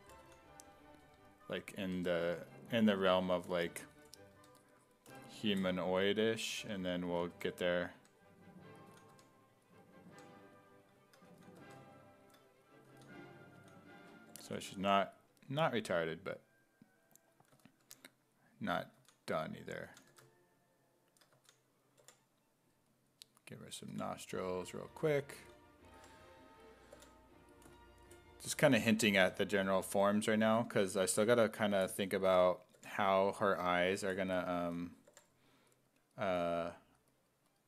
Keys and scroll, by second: 0.0-2.0 typing, 4.4 1, 6.3-9.2 typing, 11.3 s, 11.6 1, 12.9-15.3 typing, 17.6 s, 17.8 1, 19.0-22.0 typing, 23.9 4, 25.4 s, 26.0 5, 27.0 5, 28.3-29.8 typing, 32.8 5, 34.7 s, 35.1 5, 36.3 s.